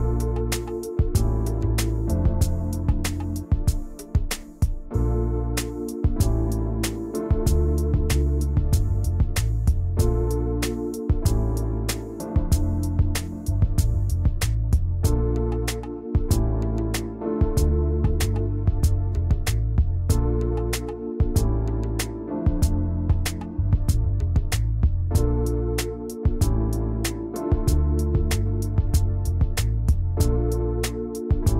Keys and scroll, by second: 6.9 ctrl+z, 12.0 ctrl+alt+2, 13.7 ctrl+x, 15.1 ctrl+shift+v, 16.1 ctrl+z, 18.4 ctrl+shift+v, 19.7 ctrl+shift+[, 27.1 ctrl+shift+[, 29.1 ctrl+shift+[.